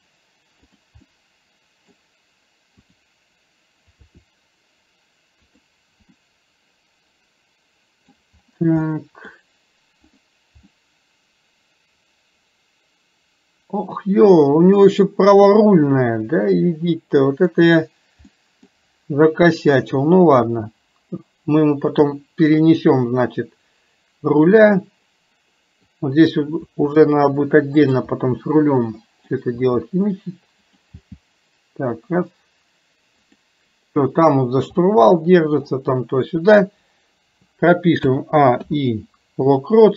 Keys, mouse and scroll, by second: 1.1 middle click, 6.1-8.2 middle drag, 8.9 middle click, 10.1 click, 10.7-17.6 middle drag, 18.4 middle click, 22.6-25.9 middle drag, 28.2-29.4 middle drag, 35.0-35.8 middle drag.